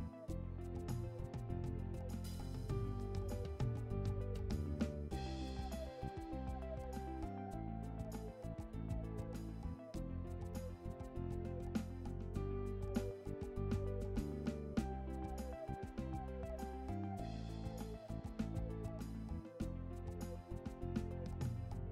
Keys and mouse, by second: 3.9 right click, 6.4 right click, 7.6 right click, 10.8 right click, 12.5 right click, 15.8 right click, 18.0 right click, 19.1 right click.